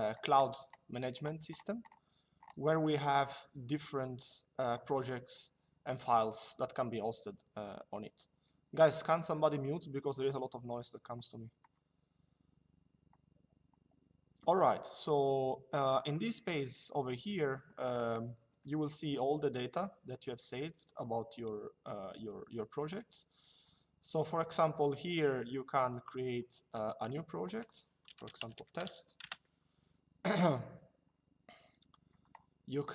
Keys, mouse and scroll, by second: 25.5 click, 27.8-28.6 typing, 28.9 Return.